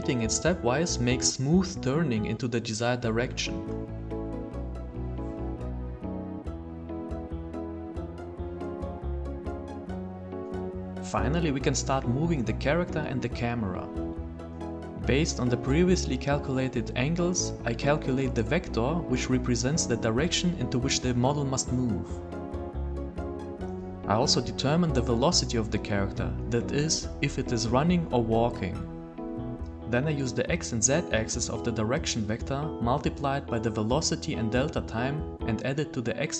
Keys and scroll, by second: 0.5 s, 1.5 d, 2.1 w, 3.6 s, 4.3 w, 5.0 a, 5.5 s.